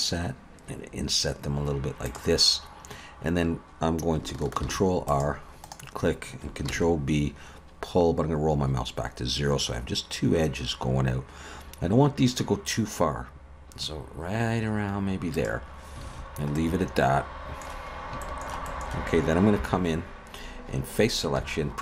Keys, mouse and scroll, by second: 4.7 ctrl+r, 6.7 ctrl+b, 16.0 alt+a, 16.6 middle click, 18.0 scroll up 1, 18.2 shift+middle click, 18.7 middle click, 19.6 3, 21.4 c.